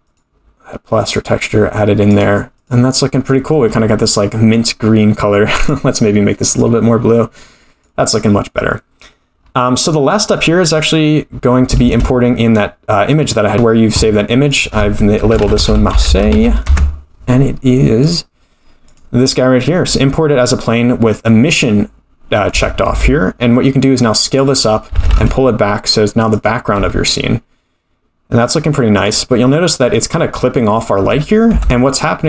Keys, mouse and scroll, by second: 1.1 click, 3.2 click, 5.6 click, 9.3-10.0 scroll down 5, 10.0 click, 10.4-10.7 middle drag, 11.8 shift+a, 22.5 Tab, 22.9 s, 24.9 g, 26.8 s, 31.5 Tab.